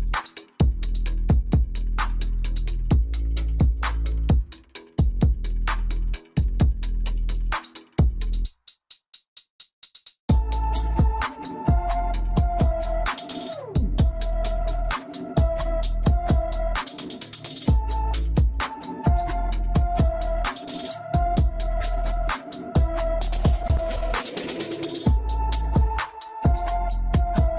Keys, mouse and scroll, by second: 0.7 click, 1.5 click, 3.2 a, 5.8 KP_3, 7.6 shift+z, 9.1 ctrl+click, 11.2-11.5 scroll up 2, 12.4-14.1 middle drag, 14.1 shift+z, 14.8-15.8 middle drag, 15.8-16.8 scroll up 8, 16.1 middle click, 16.8-17.8 shift+middle drag, 17.8-18.4 scroll up 4, 18.4-21.5 shift+middle drag, 24.0-24.7 scroll down 2, 24.7 scroll down 4, 25.5-26.6 scroll up 6, 27.1-27.4 scroll down 4.